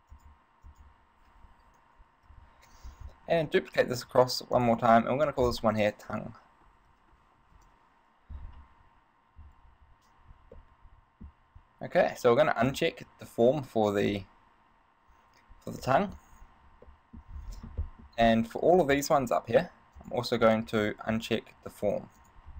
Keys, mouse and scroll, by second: 0.3 click, 3.5 shift+d, 4.8 click, 5.5 click, 10.8 shift+middle click, 12.7 click, 16.0 shift+middle click, 17.1 shift+middle click, 17.7 scroll down 2, 18.0 shift+middle click, 18.4-18.8 scroll up 3, 18.8 right click, 20.4 click, 20.9 right click, 21.3 right click, 22.4 click.